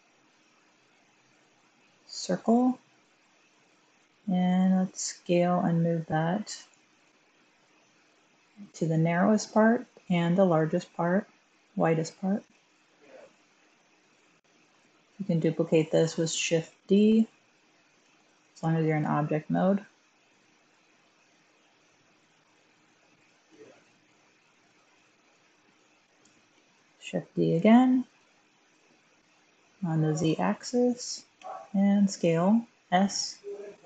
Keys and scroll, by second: 6.3 g, 6.8 z, 12.2 typing, 16.6 shift+d, 17.9 z, 23.4 s, 26.4 shift+d, 28.0 z, 31.3 s.